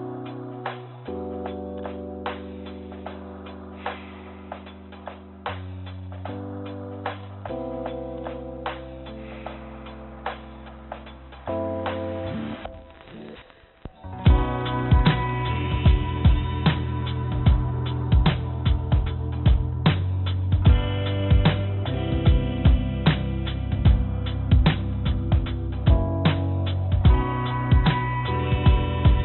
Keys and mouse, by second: 0.7 click, 3.4 g, 7.7-9.7 drag, 14.2 Tab, 15.8 click, 17.2 click, 18.6 g, 24.2 click, 24.4-26.3 drag, 27.3 g.